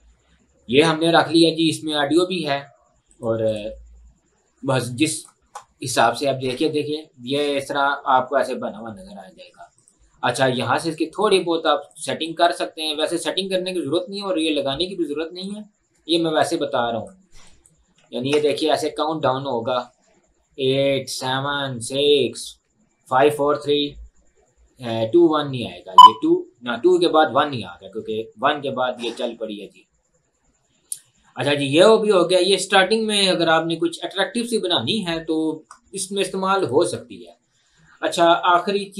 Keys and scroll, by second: 18.4 space, 22.4 space.